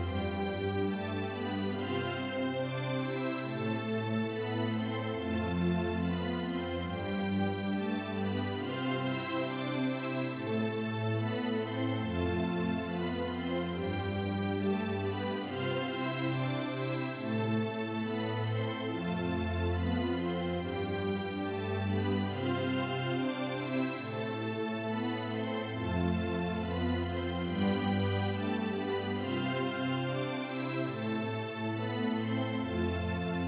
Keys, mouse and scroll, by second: 1.2 click, 4.9 click, 5.9-7.4 drag, 18.8 right click, 19.4 click, 25.0 click.